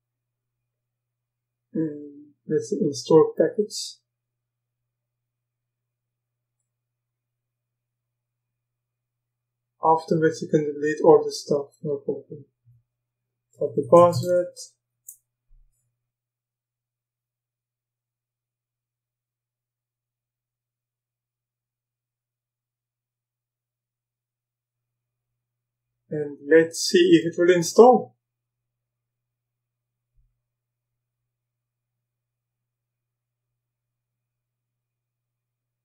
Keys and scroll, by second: 13.3-14.8 typing, 15.0 Return.